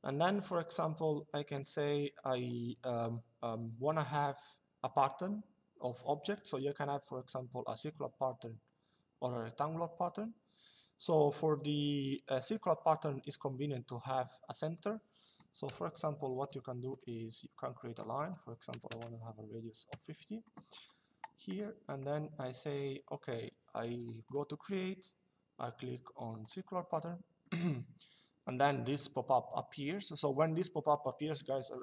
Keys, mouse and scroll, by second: 0.2 click, 14.4 click, 16.6 click, 18.4 KP_5, 19.6 Return, 21.3 middle click, 23.9 click, 26.1 click, 28.7 click, 30.3 click.